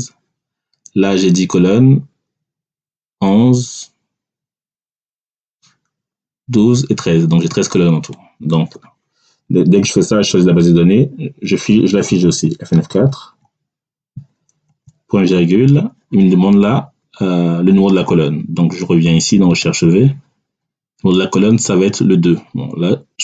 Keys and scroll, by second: 12.8 F4, 14.6 ..